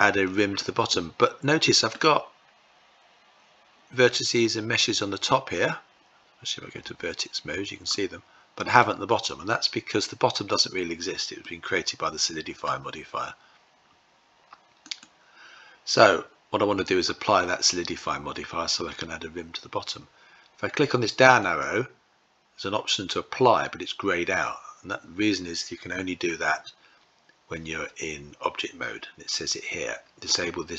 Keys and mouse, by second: 0.1-1.5 middle drag, 7.5 middle click, 11.0-12.2 middle drag, 14.4-15.6 drag, 20.9-30.7 drag.